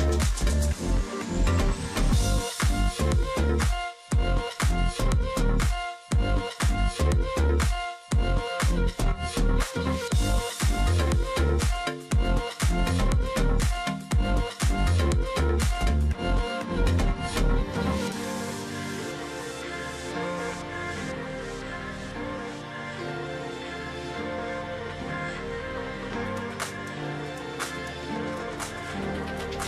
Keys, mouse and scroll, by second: 0.0 double click, 0.3 alt+scroll down 1, 0.8 space, 1.1-1.7 alt+scroll up 1, 1.9 space, 2.2 alt+scroll up 1, 2.6 space, 3.3 ctrl+click, 3.9 space, 5.5 ctrl+click, 6.0 space, 7.2 ctrl+click, 7.5 alt+scroll down 1, 7.6 space, 8.7 space, 10.7 alt+scroll down 1, 10.8 space, 11.1 alt+scroll up 1, 11.3 ctrl+click, 12.9 space, 13.6 space, 17.5 space, 18.9 alt+scroll down 1, 19.0 space, 19.3 alt+scroll up 1, 19.6 ctrl+click, 20.4-20.8 alt+scroll up 1, 20.8 shift+click, 22.2 ctrl+click, 23.9-24.5 alt+scroll down 2, 24.1 ctrl+click, 24.5-25.4 alt+scroll up 1, 26.3 shift+click, 27.1 ctrl+z.